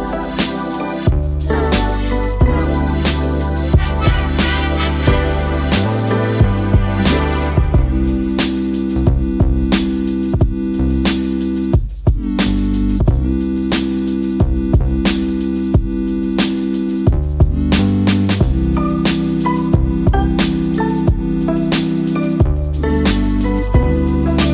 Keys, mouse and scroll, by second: 1.5 alt+scroll down 1, 2.1 space, 2.2-4.9 drag, 8.3-16.3 drag, 20.2 alt+scroll up 1, 21.9 right click, 23.5 click.